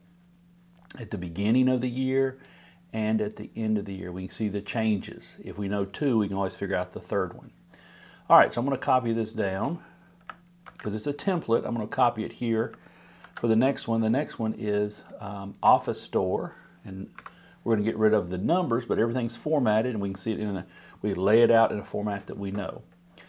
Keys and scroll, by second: 10.6 super+c, 13.2 super+v.